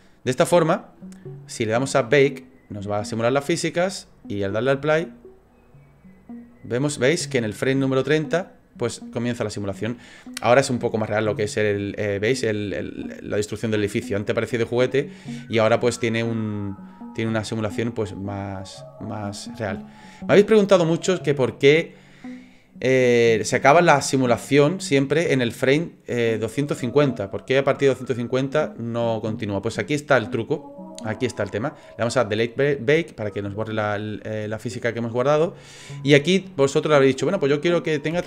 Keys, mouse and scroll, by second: 2.1 click, 16.9 middle click, 20.3 click, 32.5 click, 33.3 click, 37.1 click.